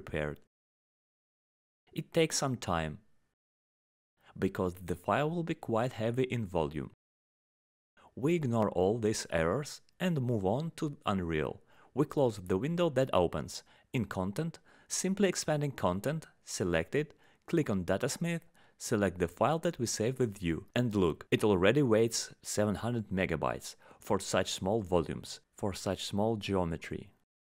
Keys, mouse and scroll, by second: 10.1 click, 11.6 click, 12.6 right click, 13.8 click, 14.6 click, 15.2 click, 17.1 click, 18.9 click, 19.5 click, 20.4 click, 22.7 middle click, 23.6 click, 25.1 click, 26.5 click.